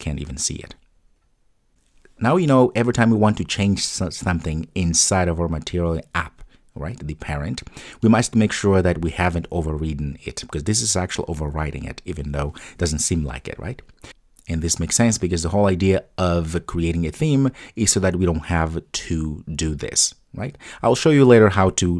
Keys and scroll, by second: 1.6 super+s.